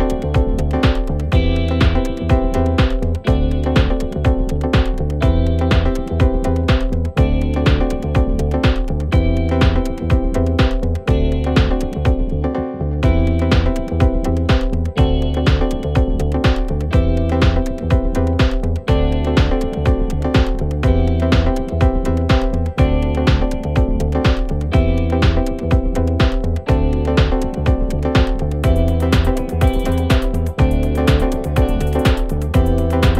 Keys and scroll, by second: 12.5 4, 21.7 1, 28.4 4, 31.4 3, 31.7 ], 32.6 4.